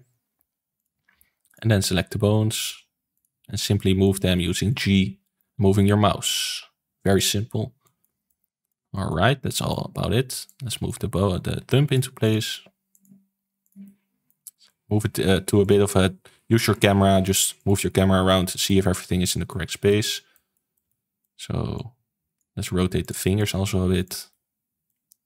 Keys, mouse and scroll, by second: 1.4 click, 1.8 g, 3.1 click, 3.4 g, 5.1 shift+middle click, 5.7 ctrl+s, 6.2 click, 6.4 g, 7.8-9.2 shift+middle drag, 9.2 scroll up 3, 9.4 shift+middle click, 9.9-10.4 scroll up 2, 10.4 click, 11.8 shift+click, 12.1 shift+click, 12.6 r, 13.0 g, 13.8-14.8 middle drag, 14.8 g, 16.3 r, 16.8 g, 17.8-21.7 middle drag, 21.7 click, 22.9 shift+click, 23.3 shift+click, 24.0 shift+click, 24.2-25.2 middle drag.